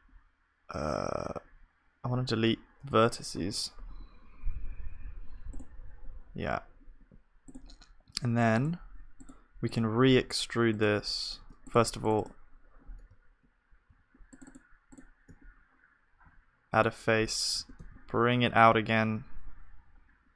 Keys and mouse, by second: 3.9 Delete, 13.6-16.9 drag, 13.6-15.1 right drag, 16.2 f, 17.6 g.